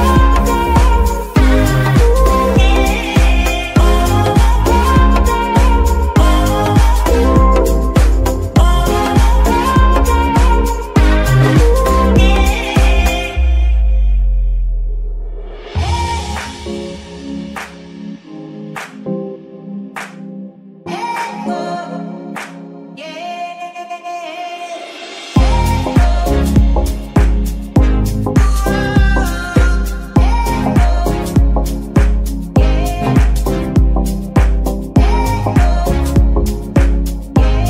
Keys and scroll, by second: 0.7 Tab, 3.2 Tab, 4.3 z, 4.6 Tab, 8.1 Tab, 9.9 shift+s, 11.2 z, 12.0 g, 12.4 Escape, 12.8 s, 14.9 KP_1, 16.3 shift+g, 19.7 shift+s, 21.4 shift+s, 23.7 shift+n.